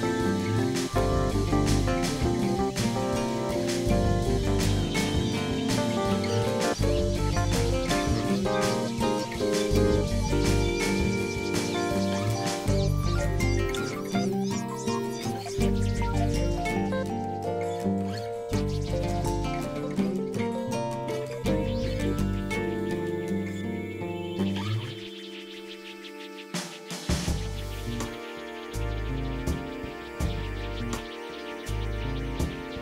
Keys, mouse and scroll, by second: 0.3 click, 1.0 click, 1.9 click, 2.7-4.3 drag, 5.3 click, 6.2 middle click, 6.9 middle click, 10.8 click, 11.5 KP_Divide, 12.7 right click, 13.1 KP_Divide, 14.2 click, 14.6 click, 15.1 middle click, 15.2 KP_1, 15.7 x, 16.1-19.2 drag, 19.4 x, 19.6 click, 20.4 click, 22.2 click, 23.2-24.2 drag, 24.5 click, 26.2 click, 26.8 click, 27.4 ctrl+z, 27.9 ctrl+z, 28.2 click.